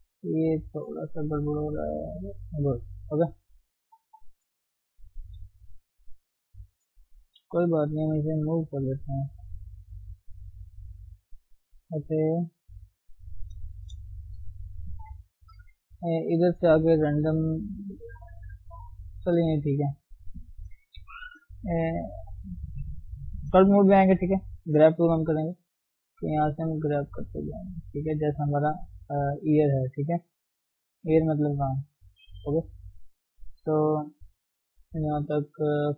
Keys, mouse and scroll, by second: 0.1 ctrl+z, 0.3 ctrl+z, 1.1 g, 1.8 click, 2.1 g, 2.9 click, 3.1 g, 3.6 scroll down 1, 3.8 middle click, 4.6 scroll up 1, 4.8-5.9 middle drag, 5.9 KP_3, 7.1 click, 7.8 g, 8.9 g, 10.1 click, 10.4 g, 11.3-11.6 scroll down 2, 11.6 shift+middle click, 11.9-12.5 shift+scroll up 3, 12.5 Tab, 12.8-13.4 scroll down 1, 13.4-13.8 scroll up 1, 13.8 shift+middle click, 14.0-14.7 scroll up 1, 14.7 ctrl+Tab, 16.3-19.2 drag, 19.2 scroll down 1, 19.5 shift+middle click, 19.8-20.9 scroll up 1, 20.9 g, 21.1 f, 21.8 shift+middle click, 22.2-22.6 scroll up 1, 22.6 scroll down 2, 22.9 shift+middle click, 23.1-23.6 shift+scroll up 1, 24.1 shift+middle click, 24.6-25.4 scroll up 1, 25.4-25.8 scroll up 1, 25.8-29.1 drag, 29.1 shift+middle click, 29.8-33.9 drag, 33.9 shift+middle click, 34.1-34.6 scroll up 1, 34.6-35.1 scroll down 1, 35.1 KP_1, 35.8 shift+middle click.